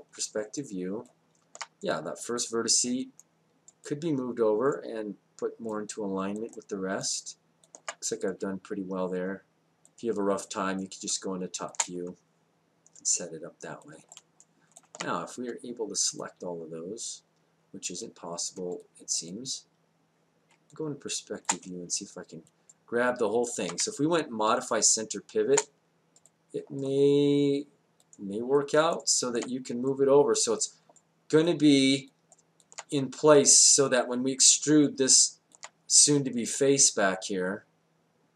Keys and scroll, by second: 10.1 space, 20.5 space, 23.8 space, 26.2 space.